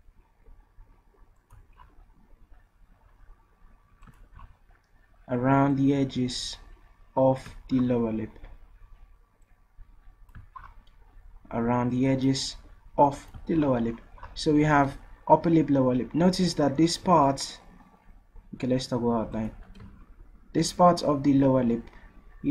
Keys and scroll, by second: 17.0 v.